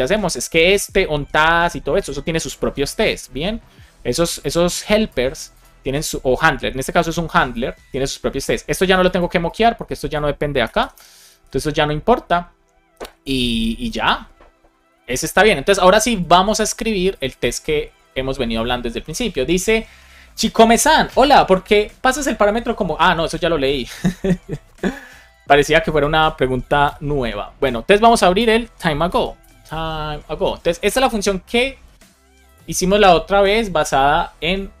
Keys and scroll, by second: 10.5 BackSpace, 11.2 super+s, 26.7 super+o, 28.3 Escape, 28.9 super+p, 30.4 Down, 30.7 Return.